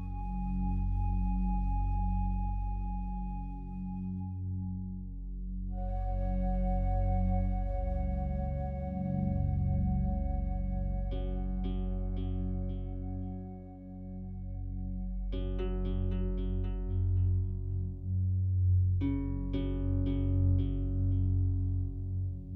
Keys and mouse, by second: 0.9 click, 4.8 click, 5.2 click, 5.9 click, 6.6 click, 9.1 click, 9.4 click, 10.1 alt+click, 10.5 click, 10.9 alt+click, 11.7 click, 11.9 click, 13.7 click, 14.5 click, 15.3 click, 16.1 0, 16.3 Return, 18.7 click, 20.4-21.9 drag.